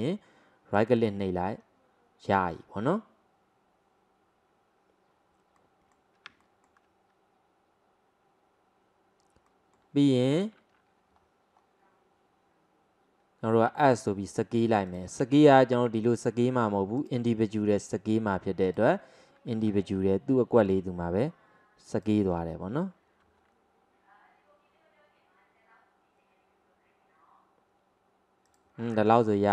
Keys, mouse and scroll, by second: 1.6-4.6 scroll down 1, 5.6-11.2 middle drag, 11.2-13.8 scroll up 1, 13.8 s, 15.6 ctrl+z, 17.0-19.7 drag, 19.7 s, 22.4 scroll up 1, 23.4 scroll up 2, 23.4 s, 28.9-29.5 scroll down 3.